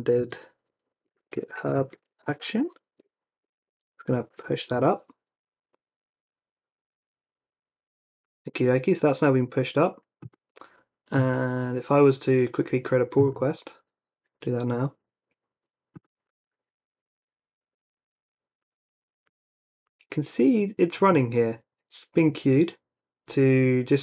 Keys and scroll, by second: 0.0-5.2 typing.